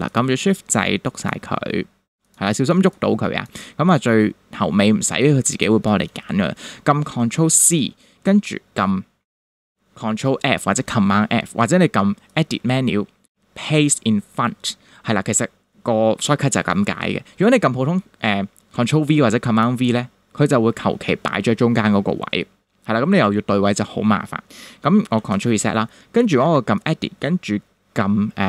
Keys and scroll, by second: 2.7 shift+space, 3.6 space, 5.0 space, 7.6 super+c, 25.2 super+z.